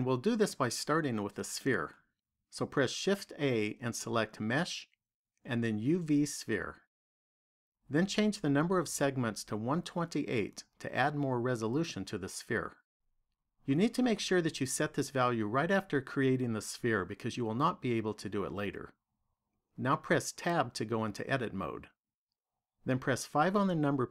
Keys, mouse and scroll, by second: 2.3 shift+a, 9.7 click, 21.0 Tab, 23.2 KP_5.